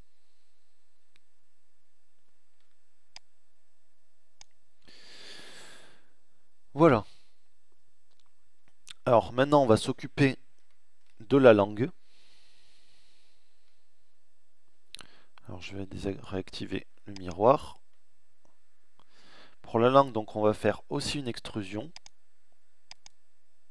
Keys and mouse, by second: 3.7-5.2 middle drag, 9.6-11.0 middle drag, 11.3 middle click, 16.1 middle click, 17.8 middle click, 18.8 middle click, 23.6-23.7 middle drag.